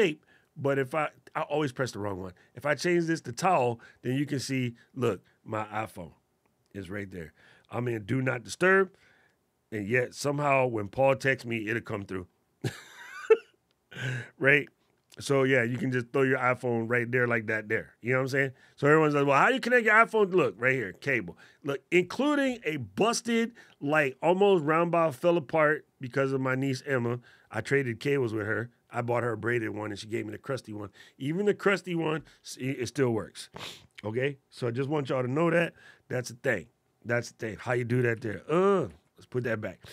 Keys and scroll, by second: 37.8 super+z.